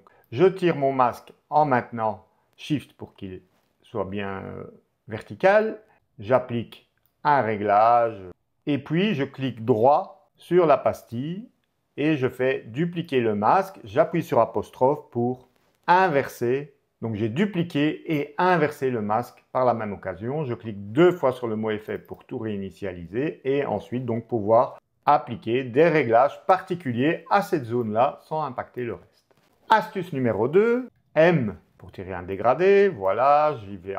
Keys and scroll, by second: 14.7 ', 16.3 ctrl+'.